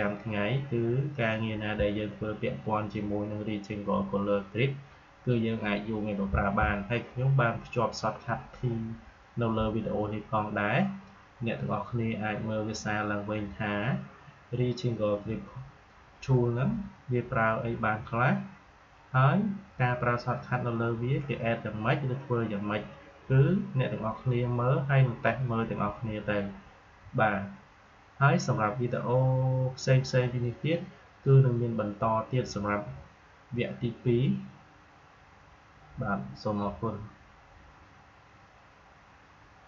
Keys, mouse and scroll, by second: 39.6 click.